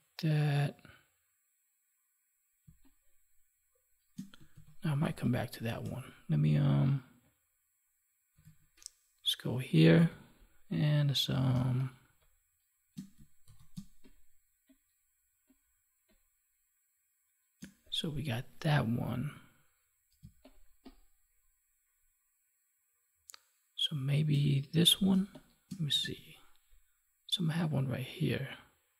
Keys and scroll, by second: 2.6 space, 5.0 space, 8.3 ctrl+Tab, 9.9 ctrl+s, 11.4 space, 13.3 ctrl+d, 13.6 space, 20.1 space.